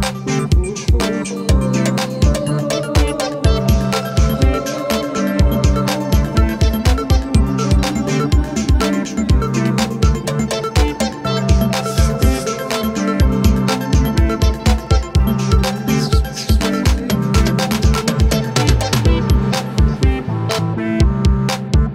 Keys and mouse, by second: 1.1 alt+BackSpace, 2.6 ctrl+d, 4.4 ctrl+0, 13.9 ctrl+=, 14.3 ctrl+=, 14.9 space.